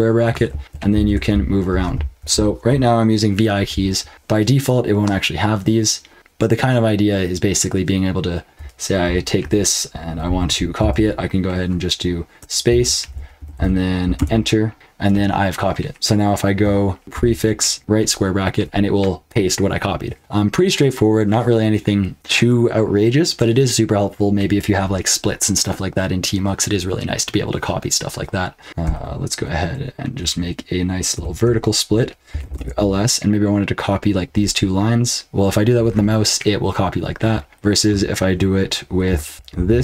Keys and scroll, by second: 0.5 ctrl+p, 0.6 ctrl+p, 0.9 ctrl+n, 1.1-4.1 typing, 8.5-11.3 typing, 12.4-13.5 typing, 14.1 Return, 17.0 ctrl+b, 17.0 p, 17.1 ctrl+b, 17.8 ], 28.8 ctrl+b, 31.1-32.9 typing, 39.1-39.8 typing.